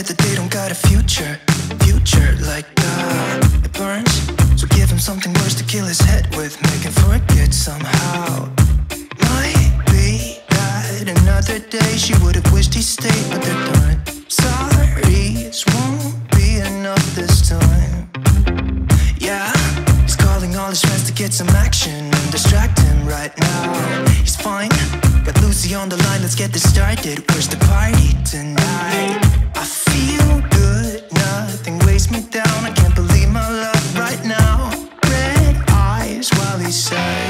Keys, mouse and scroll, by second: 0.9 click, 7.0 ctrl+a, 7.9 click, 13.0 click, 21.2 click, 27.8-32.2 drag, 34.8 click, 34.9 click.